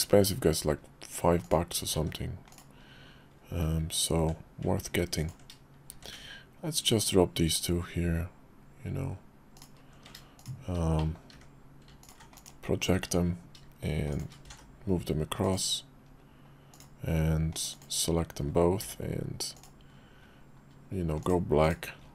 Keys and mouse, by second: 0.0 d, 2.0 s, 3.7 g, 6.0 shift+d, 10.4 shift+click, 11.0 middle click, 12.4 alt+d, 14.1 click, 14.4 alt+x, 15.7 click, 16.7 click, 17.5 click, 19.8 d, 21.6 click.